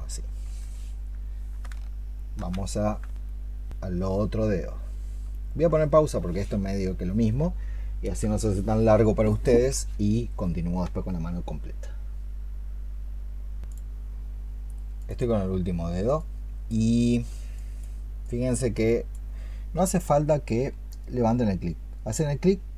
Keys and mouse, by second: 2.0 ctrl+shift+click, 5.6 ctrl+shift+click.